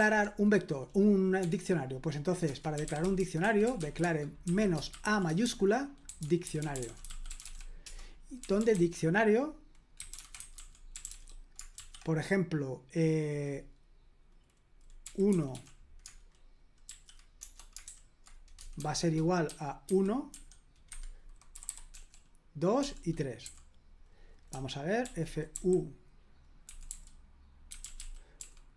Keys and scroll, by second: 0.0 super+l, 1.4 o, 2.4 Return, 2.5-11.8 typing, 14.8-23.4 typing, 20.9 Escape, 24.5-28.7 typing.